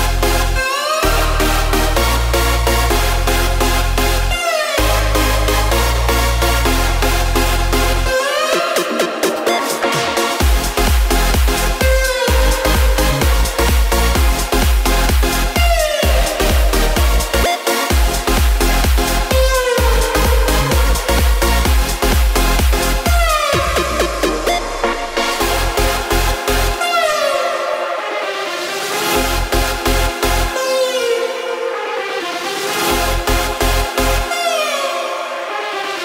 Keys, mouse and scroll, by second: 0.5 click, 1.1 shift+click, 1.7 shift+click, 2.8 shift+click, 4.1 shift+click, 6.8 g, 11.1 KP_7, 11.7 scroll down 3, 11.9 scroll up 1, 12.0-12.4 shift+middle drag, 12.4-13.7 scroll up 4, 13.7 z, 14.6 click, 16.1 click, 17.1 x, 17.8 click, 18.1 x, 18.8 click, 19.2 x, 19.5 click, 19.8 x, 20.4 click, 20.8 x, 21.4 KP_0, 22.4 z, 23.9-25.4 scroll down 1, 25.4 click, 25.9 x, 26.7 click, 28.5 KP_7, 29.1-30.1 scroll up 3, 30.1 shift+d, 31.6 r, 34.5 g.